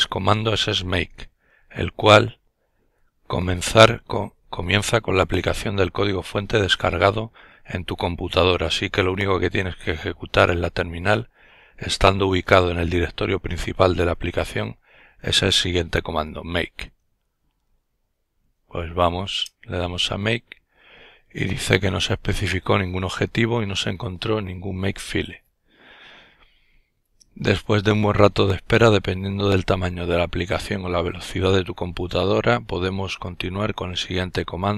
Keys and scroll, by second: 17.5-19.0 typing, 19.3 Return.